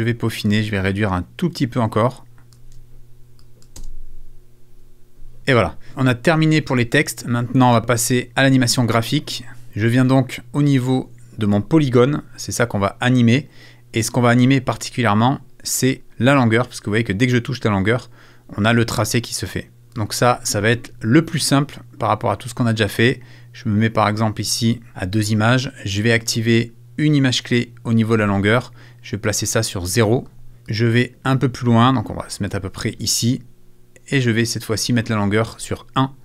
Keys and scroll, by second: 3.7 shift+space.